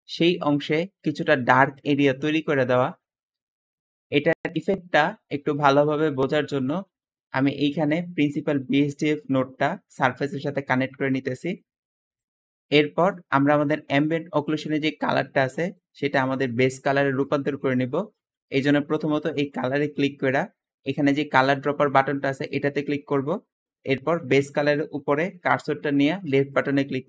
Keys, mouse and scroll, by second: 9.5-10.7 drag, 15.8 click, 17.0 click, 17.4 click, 18.2 Escape, 20.4 Escape, 22.3 click, 26.2 click.